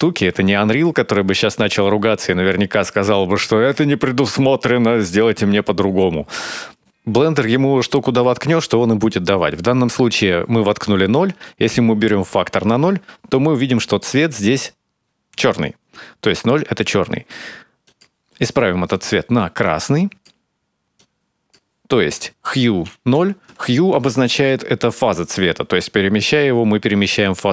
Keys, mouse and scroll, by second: 0.6 n, 1.1-1.6 scroll down 1, 1.6 middle click, 11.1 click, 17.6 click, 18.7 click.